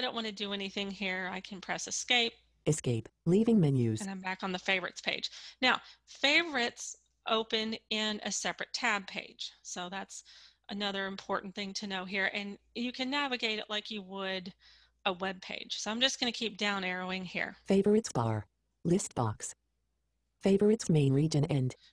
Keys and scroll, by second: 1.3 Escape.